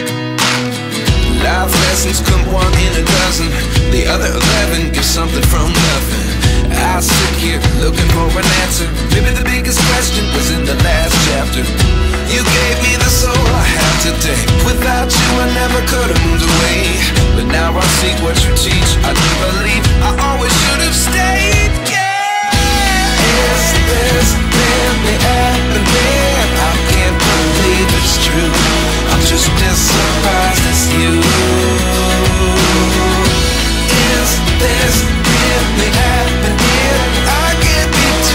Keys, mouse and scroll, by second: 1.8 Return, 3.5 ctrl+t, 4.6 ctrl+t, 5.0 alt+shift+click, 9.8 Return, 11.5 ctrl+t, 17.9 Return, 21.3 ctrl+t, 23.9 Return, 32.0-32.3 scroll down 1, 32.3 shift+click, 32.7-33.2 scroll up 1, 34.3 Up, 34.5 Up, 34.6 Up, 34.8 Up, 35.0 Up, 35.2 Up, 35.3 Up, 35.5 Up, 35.6 Up, 36.1 Up, 37.2-37.5 scroll down 1.